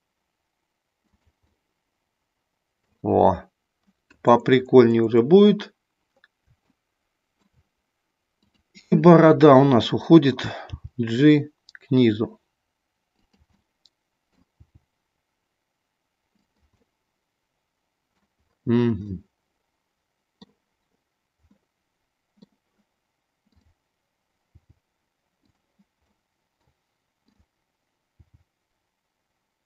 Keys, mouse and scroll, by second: 1.1 click, 1.5-2.8 middle drag, 1.5 scroll up 1, 6.7 shift+middle click, 8.4 click, 10.6 g, 13.2 click, 13.5 middle click, 14.6 g, 16.5 click, 16.7-18.1 middle drag, 19.1-20.3 middle drag, 21.5 scroll up 1, 21.7 middle click, 23.5 click, 24.5 g, 25.5 click, 26.1 scroll up 1, 26.3 middle click, 27.2 click, 28.1 g.